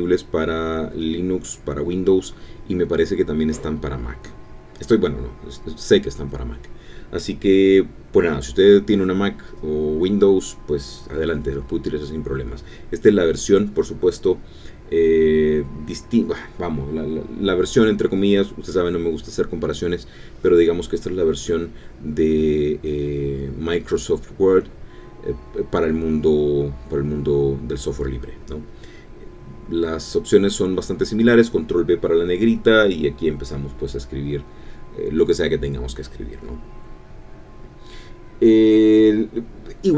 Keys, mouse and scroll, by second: 18.8 click, 21.9 click, 25.5 ctrl+b, 26.9-28.9 typing, 30.2-37.3 typing, 36.4 F11, 38.0 Escape, 39.4 BackSpace, 39.8 s.